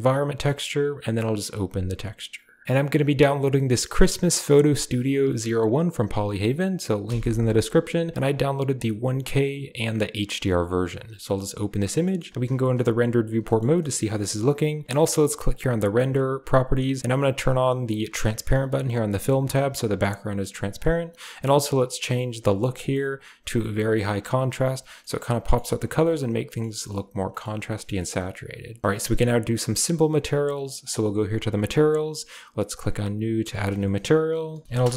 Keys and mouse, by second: 0.0 click, 11.1 click, 12.0 click, 12.3 z, 13.7 middle click, 15.4 click, 17.0 click, 18.4 click, 19.2 click, 20.0-20.4 middle drag, 22.6-24.3 drag, 24.9-25.4 middle drag, 26.0-26.6 middle drag, 26.8 middle click, 27.3 shift+click, 27.5 click, 27.8 shift+click, 28.9 shift+click, 30.7 click, 31.4 click, 32.6 click, 33.4-34.7 drag, 34.6 l, 34.6 r.